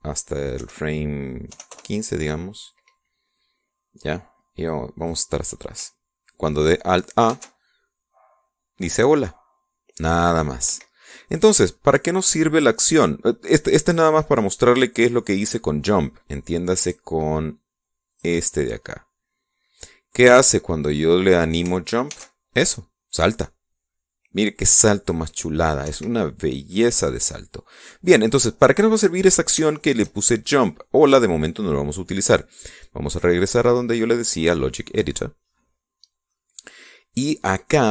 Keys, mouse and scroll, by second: 0.3 click, 1.5 KP_1, 2.4 KP_5, 2.6 KP_Enter, 5.9 click, 8.2 alt+a, 11.6 Escape, 17.8 click, 19.0 click, 20.4-21.0 scroll down 2, 21.2-22.2 drag, 23.0 alt+a, 26.8 Escape, 29.5-31.9 drag, 34.0 click, 35.1 click, 37.2 click.